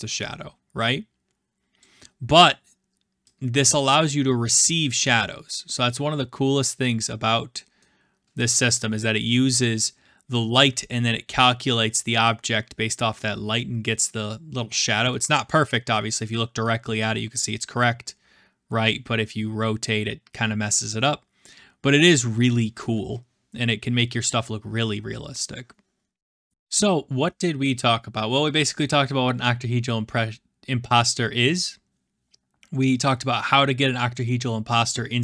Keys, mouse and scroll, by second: 0.4-1.0 middle drag, 1.7-2.6 drag, 2.6-4.8 middle drag, 4.8-7.7 drag, 17.0-18.5 middle drag, 22.7-23.9 scroll.